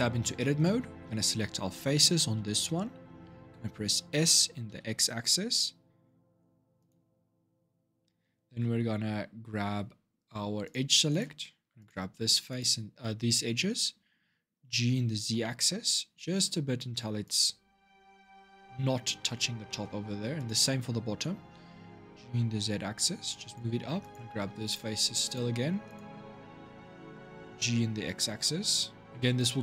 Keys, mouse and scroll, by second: 0.2-2.1 shift+middle drag, 2.1 l, 3.8 s, 10.4 click, 11.5 click, 12.3 shift+click, 14.4 g, 19.4 shift+middle click, 20.1 click, 21.8 g, 23.8 click, 24.4 shift+click, 25.0 shift+click, 25.6 shift+click, 27.3 g.